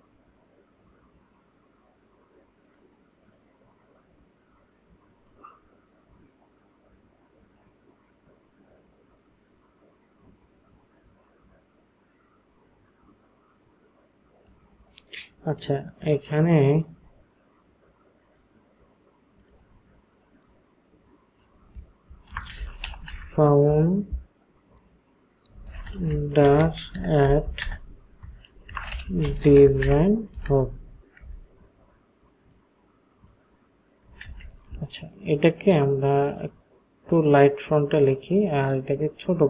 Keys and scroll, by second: 22.4-23.6 typing, 25.5-31.0 typing, 34.3 ctrl+a.